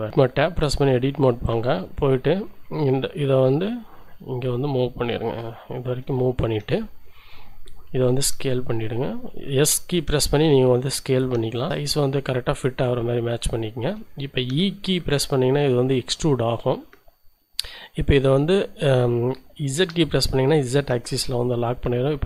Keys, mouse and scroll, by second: 1.5-5.9 drag, 6.2 scroll up 1, 6.7 shift+middle click, 8.3 s, 11.7 click, 13.4 shift+middle click, 14.6 e, 19.9 z.